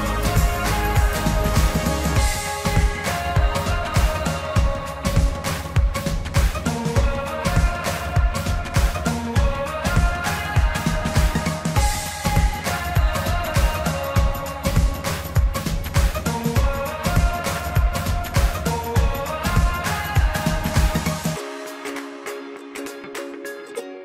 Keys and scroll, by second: 18.5 ctrl+t.